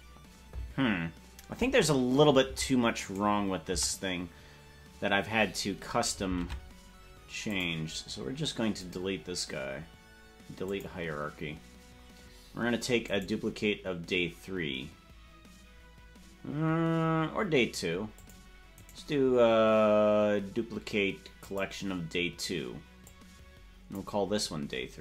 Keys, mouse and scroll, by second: 6.4 ctrl+Tab, 7.4 click, 8.7-18.1 right drag, 18.1 click, 18.7-23.0 right drag, 23.0-24.4 drag.